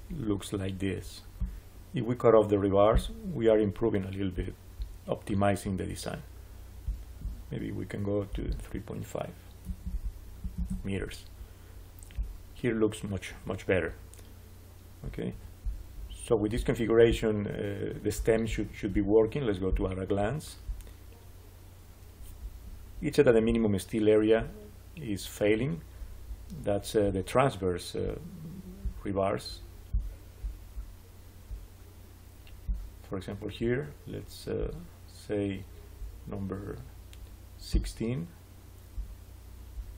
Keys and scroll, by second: 9.3-10.3 typing, 10.5 Return.